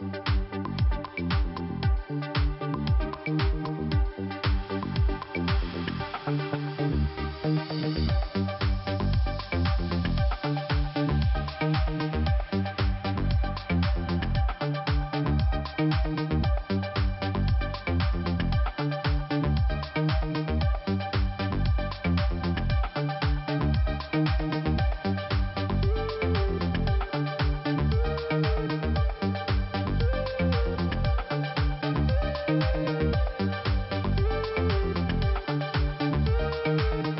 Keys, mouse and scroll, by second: 2.6 click, 2.7 click, 3.0 click, 3.0 double click, 3.8 double click, 5.2 click, 5.3 click, 5.5 click, 5.6 double click, 6.1 double click, 8.7 click, 10.6 click, 10.7 click, 13.3 click, 14.6 click, 15.1 click, 18.3 click, 20.9 click, 21.7 click, 21.9 double click, 25.2 click, 29.3 click, 29.8 click, 29.9 double click, 30.6 double click, 30.8 double click, 30.8 double click, 34.0 click, 34.2 click.